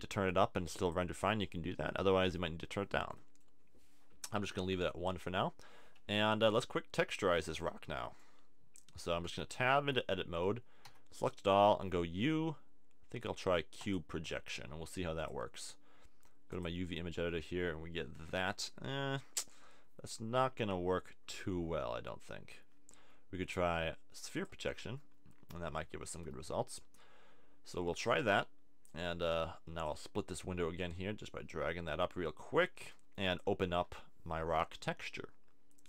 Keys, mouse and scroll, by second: 0.3-1.3 drag, 2.0-8.2 middle drag, 9.2 Tab, 9.5 a, 10.8 a, 10.8 u, 15.2-17.3 drag, 23.0 u, 26.1 a, 26.5 Tab, 29.0-30.0 drag, 32.7 click, 34.1 click, 35.8 click.